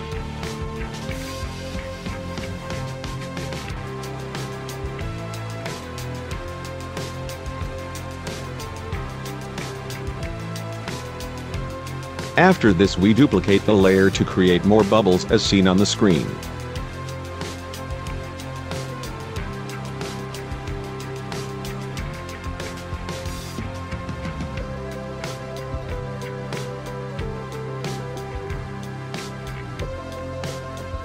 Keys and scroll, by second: 10.5 ctrl+e, 18.7 ctrl+t, 21.1 ctrl+j, 21.7 ctrl+t.